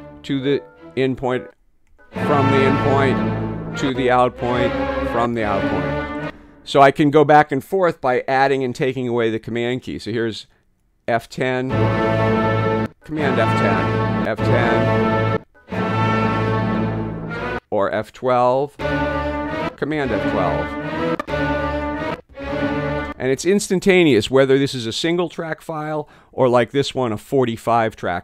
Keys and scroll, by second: 1.9 super+F10, 3.8 super+F11, 5.1 super+F12, 6.2 space, 11.5 F10, 12.8 super+F10, 14.2 F10, 15.3 super+F10, 18.6 F12, 19.5 super+F12, 21.1 F12, 22.0 super+F12, 23.0 space.